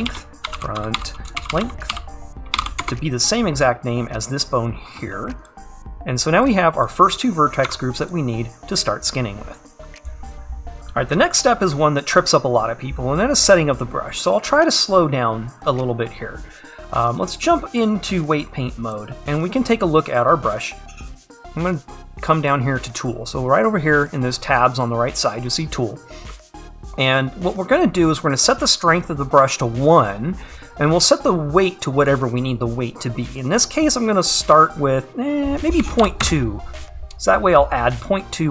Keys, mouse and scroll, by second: 7.7 Tab, 8.7 click, 10.5-10.9 scroll down 1, 10.9-13.1 scroll up 1, 19.0-38.5 drag.